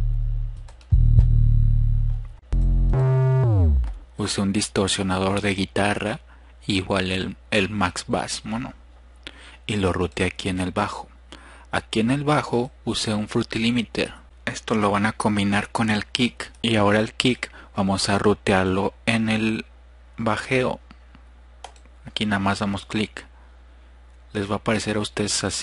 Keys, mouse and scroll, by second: 24.2 click.